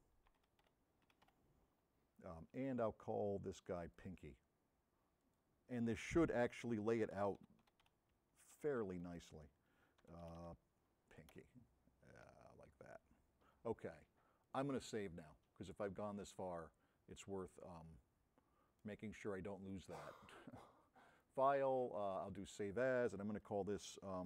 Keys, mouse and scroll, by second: 0.4 t, 8.7 BackSpace, 10.3-11.0 typing, 14.5 click, 15.1 middle click, 16.0 scroll up 1, 17.2-19.9 drag, 21.2 click, 22.3 click.